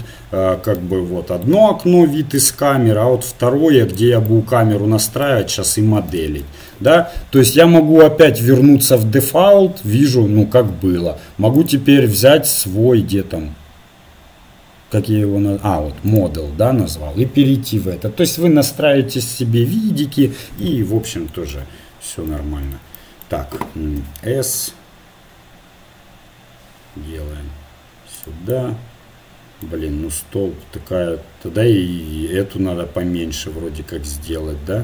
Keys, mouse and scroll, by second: 0.2 click, 2.4-4.2 drag, 4.7-9.0 middle drag, 7.6-9.0 drag, 9.9 click, 10.0 middle click, 12.2-13.5 drag, 20.6 middle click, 21.5 KP_7, 21.9 KP_7, 24.0 s.